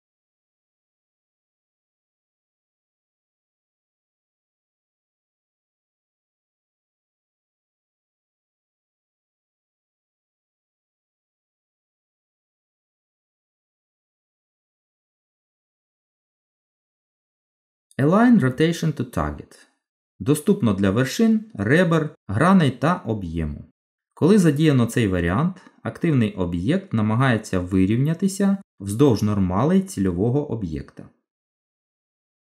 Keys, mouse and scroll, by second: 3.4 middle click, 9.3 Tab, 10.0 middle click, 14.5 click, 22.9 click, 23.4 middle click, 26.7 g.